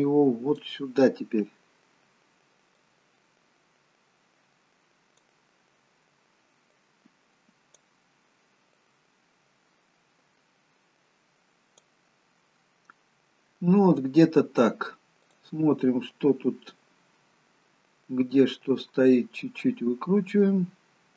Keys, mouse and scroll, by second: 2.9 click, 6.9 click, 8.9 click, 13.1-15.3 scroll up 1, 15.4 click, 19.3 click.